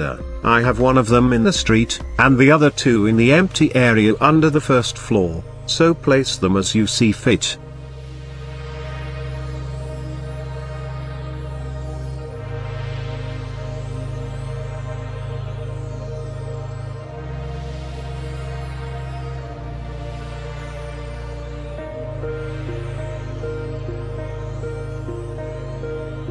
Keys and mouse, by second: 0.3 shift+z, 1.1 drag, 3.1 g, 3.6 shift+z, 4.7 click, 5.9 g, 6.3 shift+z, 7.2 click, 8.9-9.4 shift+middle drag, 9.4 shift+click, 10.3-10.7 middle drag, 11.0-11.3 shift+middle drag, 12.4 shift+middle click, 12.9-13.3 middle drag, 13.8 g, 14.2 x, 14.9 y, 15.7 click, 16.1 KP_Decimal, 17.9-18.6 middle drag, 18.9 g, 19.2 z, 21.9 shift+drag, 22.7-23.3 middle drag, 24.3 g, 24.6 x, 25.1 click, 25.6 g, 25.9 y.